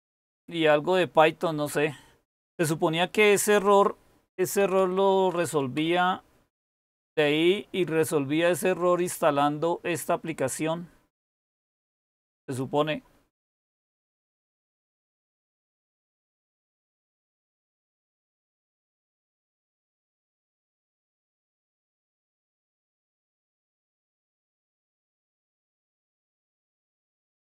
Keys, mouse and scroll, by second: 4.3-5.7 typing, 16.9-19.4 typing, 20.8-21.3 typing.